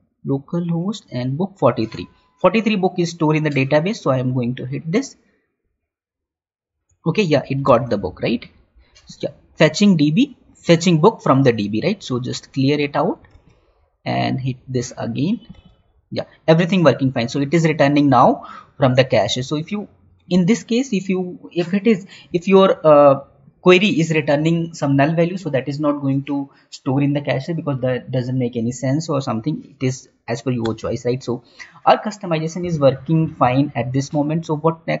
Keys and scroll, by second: 8.0 alt+Tab, 13.9 Tab, 15.8 Tab, 20.8 Tab, 22.5 alt+Tab.